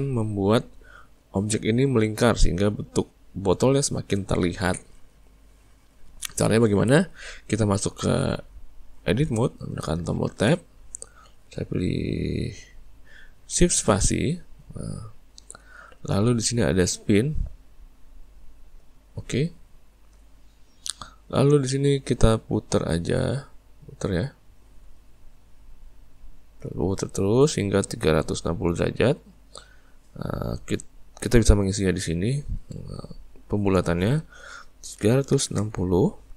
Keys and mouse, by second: 10.4 Tab, 13.8 shift+space, 23.2 click, 31.2-36.3 drag.